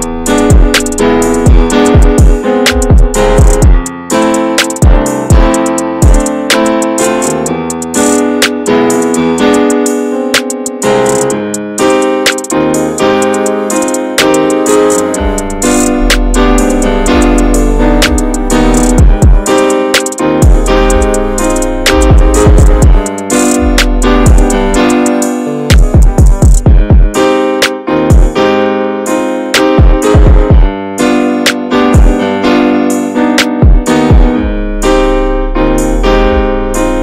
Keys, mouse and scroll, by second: 0.1 scroll up 1, 0.1 click, 0.7 `, 1.1 middle click, 1.4-2.2 scroll down 3, 2.3 s, 3.7 x, 4.2 Tab, 4.4 click, 4.8 ctrl+a, 5.1 Tab, 5.7 click, 6.5 click, 7.2 click, 8.0 2, 9.1-10.3 alt+shift+drag, 10.3 x, 10.7 middle click, 11.6 click, 12.2 alt+shift+click, 12.4 scroll down 3, 12.7-13.8 middle drag, 13.8 alt+shift+click, 14.1-15.4 middle drag, 15.4 alt+shift+click, 15.7 middle click, 16.3 alt+shift+click, 16.7-18.2 shift+middle drag, 18.2 alt+shift+click, 18.6 scroll down 2, 18.8-20.4 middle drag, 20.4-20.9 scroll up 1, 20.9 alt+shift+click, 21.2 scroll down 2, 21.5-23.2 middle drag, 23.2 right click, 23.6 middle click, 24.3 a, 24.6 a, 24.7 right click, 25.7 middle click, 26.4 /, 27.1-28.6 middle drag, 28.6 s, 30.2 Tab, 30.5-31.0 drag, 31.0 shift+middle click, 31.4 ctrl+s, 31.7 click, 32.3 Tab, 33.2 a, 33.3 s, 36.8 Tab.